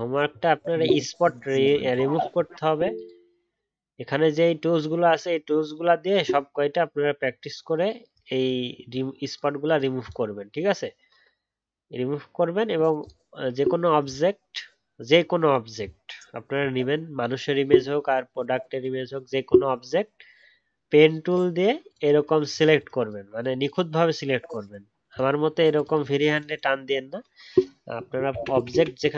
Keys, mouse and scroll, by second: 28.5 ctrl+z, 28.7 ctrl+z, 29.0 ctrl+z.